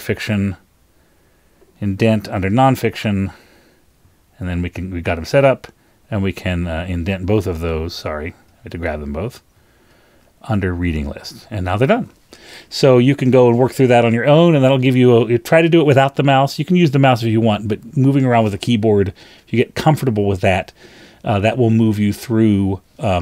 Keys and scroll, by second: 2.5 shift+Down, 2.6 shift+Down, 4.4 shift+super+Up, 7.4 shift+super+Down, 8.6 shift+Down, 11.3 super+Up.